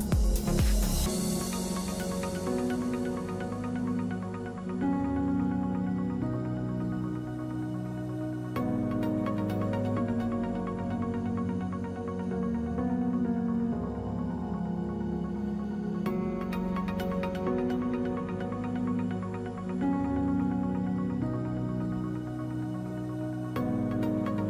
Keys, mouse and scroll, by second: 2.1 ctrl+click, 7.8 Right, 8.5 Right, 9.4 Left, 9.6 ctrl+a, 11.2 ctrl+d, 13.8 ctrl+d, 13.9 ctrl+a, 21.8 ctrl+d.